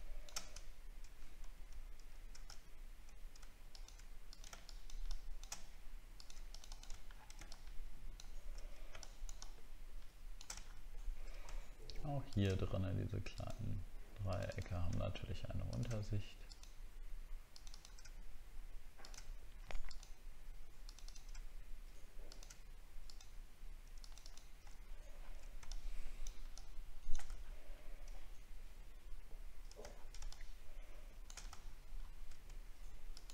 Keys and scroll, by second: 7.1 alt+scroll down 1, 10.6 alt+scroll up 7, 24.8 alt+scroll down 1, 27.4 alt+scroll up 4, 29.9 alt+scroll down 1.